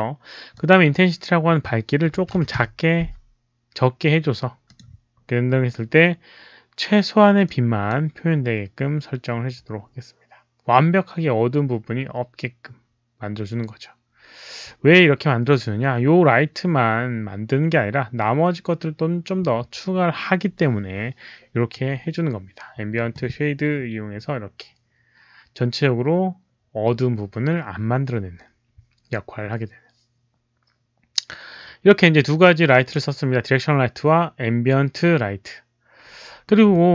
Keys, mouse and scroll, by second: 0.5 click, 2.1 KP_Decimal, 2.3 KP_1, 2.5 Return, 4.6 click, 7.4-7.8 drag, 7.4 KP_Decimal, 32.3 click.